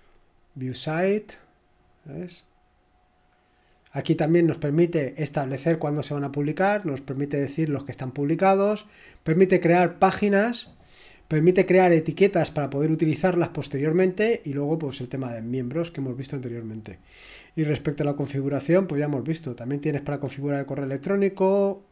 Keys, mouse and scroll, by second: 0.0 click, 8.9 click, 10.8 click, 11.8 click, 19.1-20.7 scroll down 2.